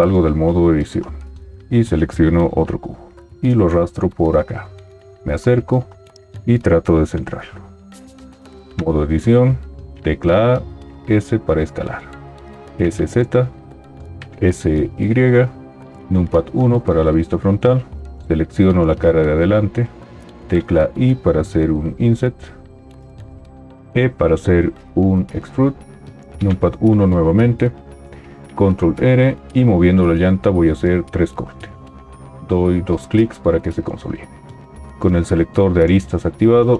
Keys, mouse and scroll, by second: 0.1 Tab, 3.9 g, 8.6 Tab, 9.9 a, 11.1 s, 12.6 s, 12.6 z, 14.3 s, 14.3 y, 16.1 KP_1, 20.8 i, 24.0 e, 26.5 KP_1, 28.5 ctrl+r, 29.9-31.8 middle drag, 29.9-30.2 scroll.